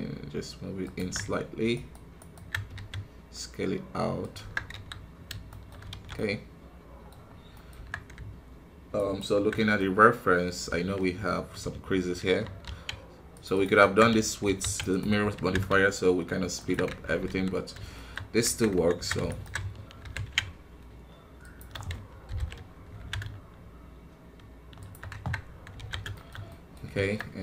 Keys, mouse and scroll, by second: 1.7-2.7 alt+right drag, 2.7 s, 4.4 Tab, 4.7 KP_1, 4.8-5.2 scroll down 5, 5.4 shift+middle click, 5.8 alt+a, 6.1-7.1 middle drag, 7.1 scroll up 1, 7.5 middle click, 7.7 Tab, 8.9 alt+right click, 9.5 middle click, 9.8 scroll up 1, 12.4 ctrl+r, 17.2 KP_1, 17.6-17.9 scroll down 1, 17.9 shift+middle click, 18.1 scroll up 1, 18.4 Tab, 19.2 alt+right click, 20.0 ctrl+b, 22.2 ctrl+KP_Subtract, 22.9 alt+s, 25.5 scroll down 2, 25.7 alt+a, 26.1 shift+middle click, 26.7 scroll up 1, 27.0 Tab, 27.1-27.4 middle drag.